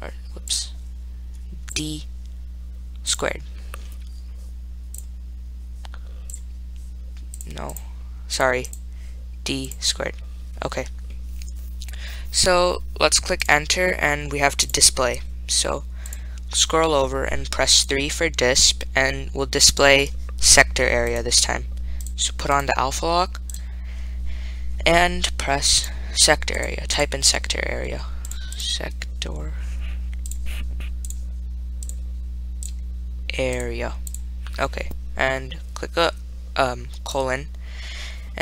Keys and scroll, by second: 7.6 Left, 8.0 Delete, 8.6 Left, 8.9 Delete, 13.7 Return, 16.3 Right, 18.1 3, 28.5 4, 28.8 7, 31.3 0, 37.4 ..